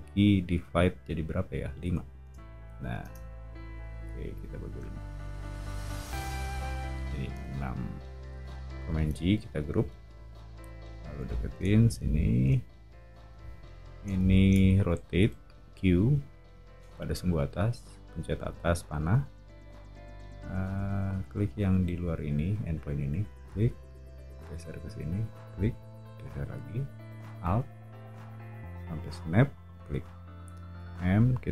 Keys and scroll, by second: 1.9 5, 2.2 Return, 3.0 space, 8.9 super+g, 9.8 o, 15.2 q, 18.4 Up, 30.8 m.